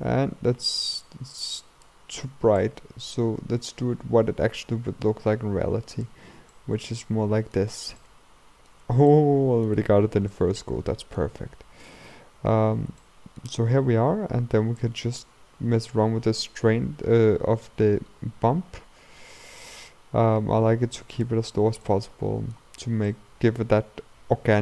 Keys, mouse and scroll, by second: 1.1-5.6 drag, 6.6-10.0 middle drag, 10.0-10.4 scroll up 2, 10.4-12.0 middle drag, 12.0-12.4 scroll up 2, 12.4-13.0 scroll down 3, 13.0-15.0 shift+middle drag, 15.0-17.9 drag, 17.9-22.9 middle drag, 22.8-23.1 scroll up 1, 23.1-24.6 middle drag.